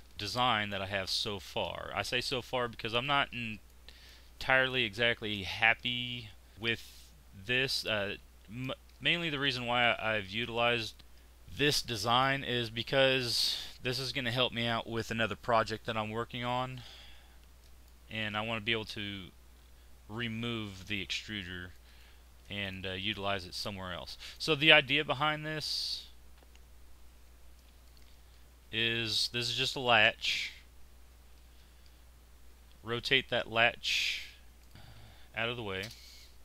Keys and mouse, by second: 2.2-3.8 middle drag, 2.7 z, 10.7 click, 11.0 x, 29.8 shift+r, 34.7 shift+r.